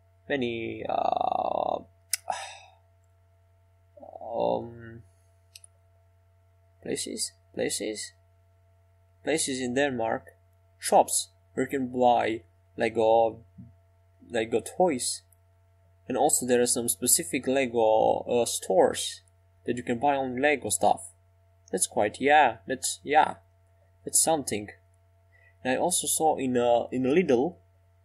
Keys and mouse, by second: 19.9-21.3 drag.